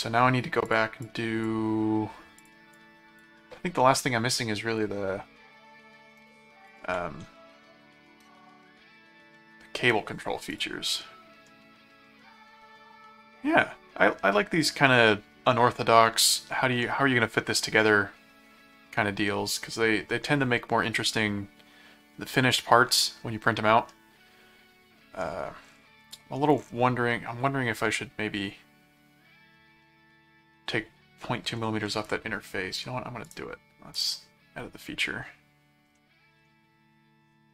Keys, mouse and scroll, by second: 0.6 click, 2.4 click, 6.6 ctrl+click, 6.8 ctrl+r, 10.5 click, 11.0 middle click, 13.6 middle click, 15.0 middle click, 16.3 middle click, 17.1 middle click, 23.9-25.2 middle drag, 33.2 right click, 33.9 click, 36.0 middle click.